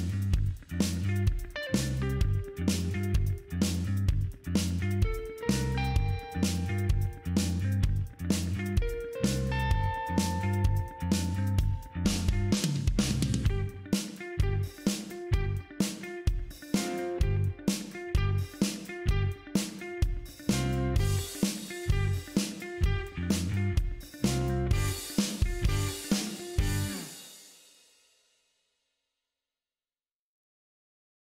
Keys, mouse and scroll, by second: 1.8 click, 2.6 middle click, 3.9 click, 5.0 space, 17.6 space, 19.1-23.2 drag, 29.5 click, 31.3 click.